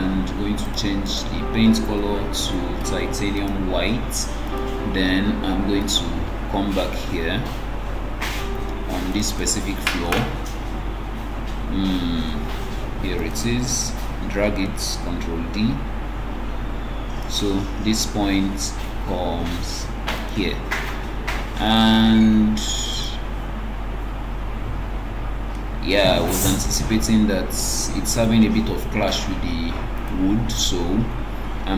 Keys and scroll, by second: 14.3 ctrl+d.